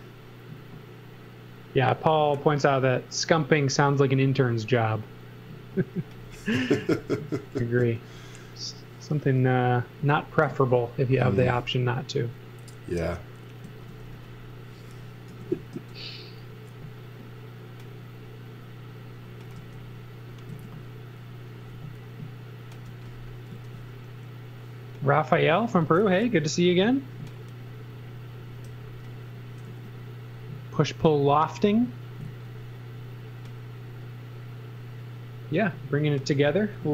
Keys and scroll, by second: 10.0 x, 10.4 z, 11.4 l, 13.6 z, 14.1 x, 14.7 space, 15.3 l, 19.5 space, 20.5 l, 22.8 x, 23.5 z, 26.1 l, 28.6 e, 29.7 a, 32.2 z, 36.7 l.